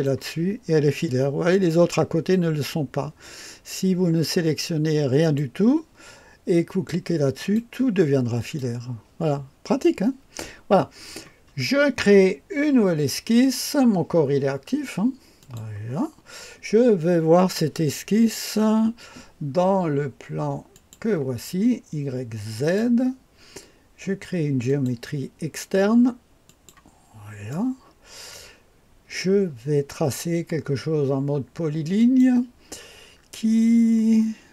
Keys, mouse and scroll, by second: 5.2 click, 7.4 click, 8.4 click, 15.4 click, 20.7 click, 22.5 click, 24.7 click, 26.5 click, 27.5-29.2 right drag, 32.0 click.